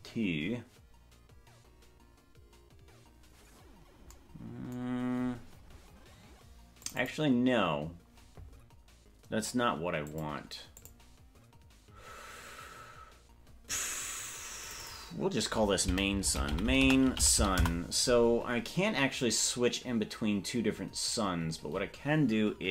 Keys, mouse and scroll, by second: 6.8 click, 7.2-10.9 drag, 14.6 click, 15.0-18.4 drag.